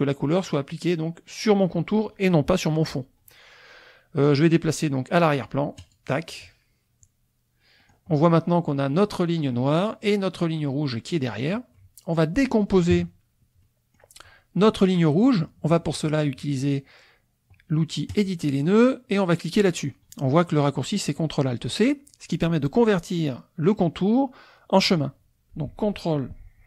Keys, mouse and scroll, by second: 5.8 click, 7.8 middle click, 7.8 scroll down 1, 8.7 click, 11.7 click, 12.9 KP_Subtract, 13.6 click, 14.1-18.1 middle drag, 18.1 click.